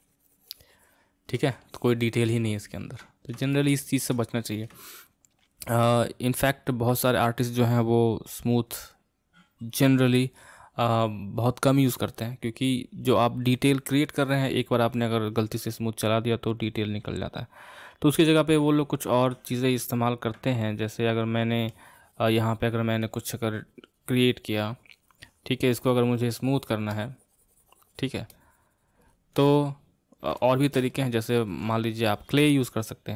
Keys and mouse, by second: 1.6-8.2 ctrl+middle drag, 18.8-20.5 shift+middle drag, 20.5-26.1 drag, 26.9-29.5 drag, 29.5-33.1 middle drag.